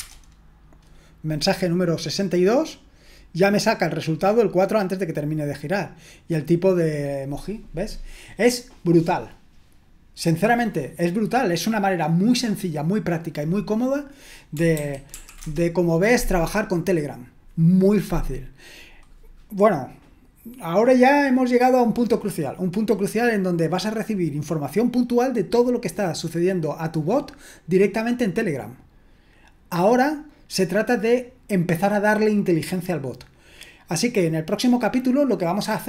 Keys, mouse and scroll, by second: 0.0 Return, 13.8 click, 14.8 ctrl+c, 15.1 ctrl+l, 15.4 Return.